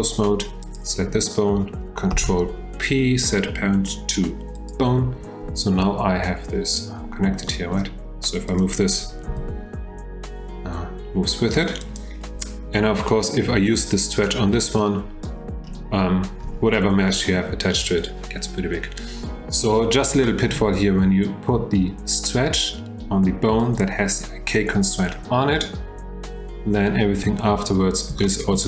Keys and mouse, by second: 0.6 click, 2.1 ctrl+p, 7.6 shift+click, 8.5 click, 9.3 g, 14.9 click, 17.1 shift+drag, 20.2-20.5 shift+middle drag, 28.2-28.5 shift+drag.